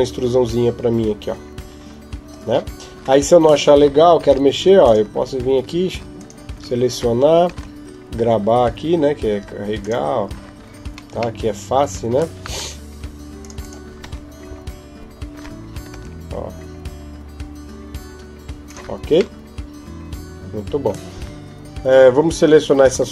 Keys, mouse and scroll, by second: 4.0 ctrl+Tab, 5.9 alt+right click, 7.2 g, 11.2 middle click, 12.3 ctrl+Tab, 13.4 right click, 14.3 KP_7, 15.7 g, 19.2 middle click, 22.7 KP_7.